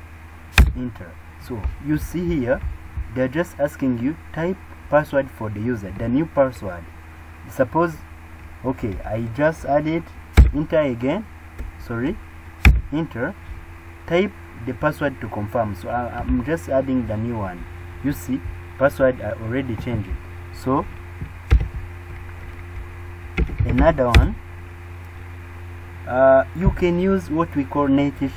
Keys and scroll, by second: 21.5 super+r.